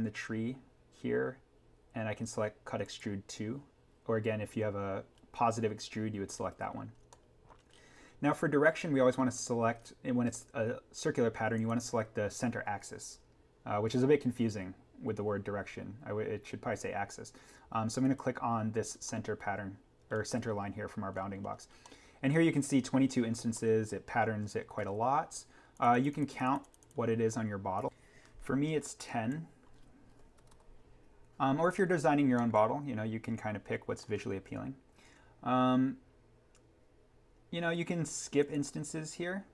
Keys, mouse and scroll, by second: 2.8 click, 7.1 middle click, 7.3-7.7 scroll, 11.5-12.0 scroll down 1, 18.0 click, 18.9 scroll up 1, 19.1-20.7 middle drag, 20.7-21.2 scroll down 1, 21.8 middle click, 22.1-22.5 scroll, 23.5 scroll up 1, 23.5 middle click, 23.8 scroll, 25.7 click, 29.8-30.9 typing, 31.8-32.4 scroll up 1, 32.4 middle click, 32.7 scroll, 38.4 click.